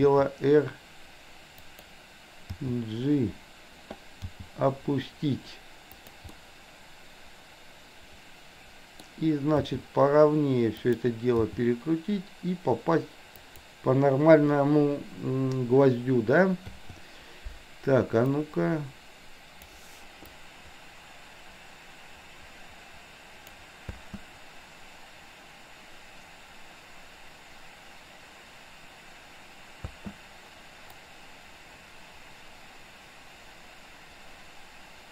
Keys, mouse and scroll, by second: 0.0 r, 2.5 g, 4.4 g, 6.3-9.0 middle drag, 9.8 r, 11.5 g, 16.8 i, 18.4-19.8 drag, 20.4-23.6 drag, 23.9 space, 29.9 space, 31.0-35.1 drag.